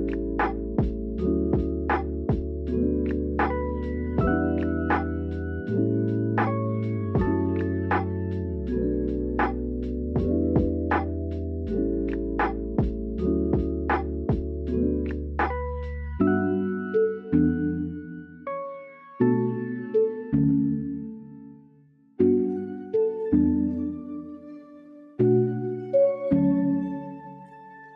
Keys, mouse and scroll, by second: 0.4 click, 0.9 g, 1.6 click, 1.7 g, 2.0 click, 2.3 click, 2.4 g, 3.7 click, 4.5 shift+click, 6.7 g, 7.4 click, 7.5 g, 7.8 click, 8.3 shift+click, 8.7 shift+middle click, 9.2 shift+middle click, 13.0 click, 14.2 shift+click, 15.6 i, 16.4 click, 17.4 KP_3, 18.6 Tab, 19.8 Tab, 20.3 middle click, 22.7 s, 23.0 click, 23.4 KP_1, 24.3 shift+middle click, 25.0-26.2 drag, 26.2 Tab, 26.8 Tab, 27.3 middle click.